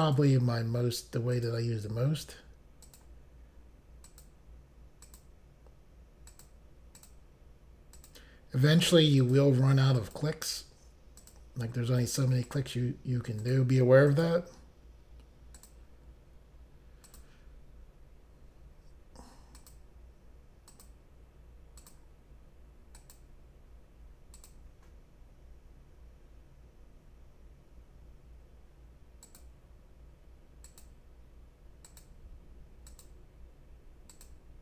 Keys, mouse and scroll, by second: 0.1 click, 1.4 click, 2.9 click, 4.1 click, 5.1 click, 6.3 click, 7.0 click, 8.0 click, 9.2 click, 10.0 click, 11.2 click, 12.5 click, 13.4 click, 14.1 click, 15.6 click, 17.1 click, 19.6 click, 20.7 click, 21.8 click, 23.0 click, 24.4 click, 29.3 click, 30.7 click, 31.9 click, 33.0 click, 34.2 click.